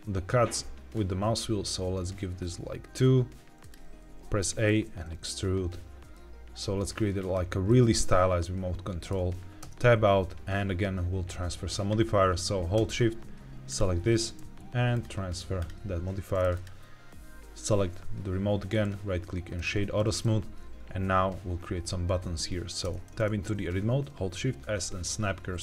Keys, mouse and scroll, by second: 0.9-2.4 scroll up 2, 3.5 click, 4.3 a, 4.7 e, 7.1 click, 7.6-9.0 middle drag, 9.5 Tab, 13.6 shift+click, 14.8-15.6 drag, 16.4 click, 18.6 right click, 24.2 shift+s.